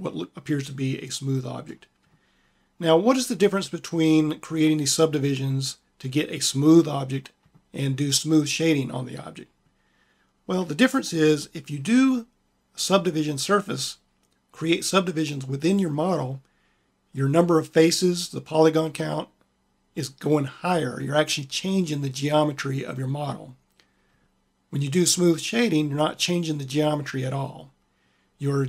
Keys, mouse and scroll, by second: 0.1 middle click, 0.4 middle click, 0.6 middle click, 10.4-19.1 drag.